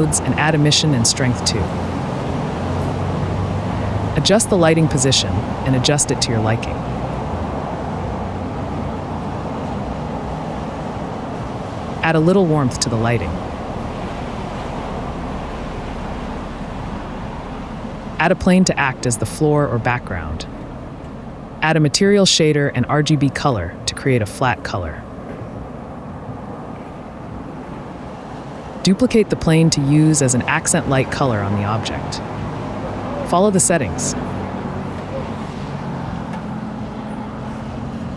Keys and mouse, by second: 0.4 click, 1.8-2.3 drag, 3.1 click, 4.8 n, 5.2 click, 5.9 click, 6.9 click, 7.5 click, 7.9 shift+click, 8.5 g, 8.5 x, 9.3 shift+click, 10.2 shift+click, 10.8 shift+middle click, 18.5-19.5 drag, 20.1 Tab, 20.4 a, 20.5 s, 21.4 Tab, 23.1 shift+a, 24.5 click, 24.7 Delete, 27.4 click, 28.1 click, 28.4 click, 29.4 click, 30.3 shift+d, 33.3 KP_Decimal, 33.3 g, 33.5 z, 35.0 click, 35.4 click, 35.5 shift+a, 35.8 s, 36.4 click, 37.5 click.